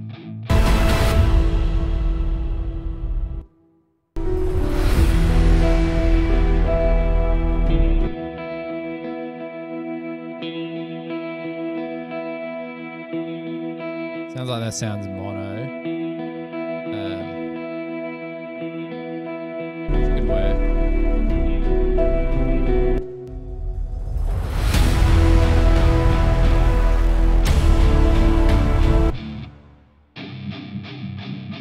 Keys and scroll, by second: 1.6 super+=, 2.8 super+[, 3.5 space, 8.2 s, 20.0 s, 23.1 space, 23.3 space, 26.3 super+=.